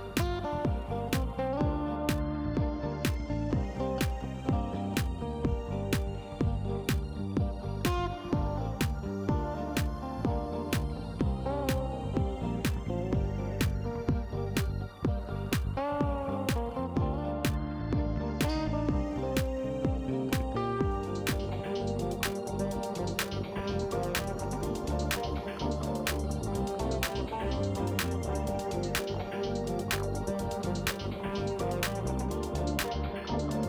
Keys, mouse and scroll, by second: 0.8 click, 4.5 click, 6.5 click, 7.2 click, 8.1 shift+right click, 9.7 shift+right click, 14.0 shift+right click, 15.3 shift+right click, 15.9 shift+middle click, 19.0 click, 20.0 click, 22.6 click, 24.4 click, 27.4 click, 28.2 click, 28.6 right click, 29.1 click, 33.2 click.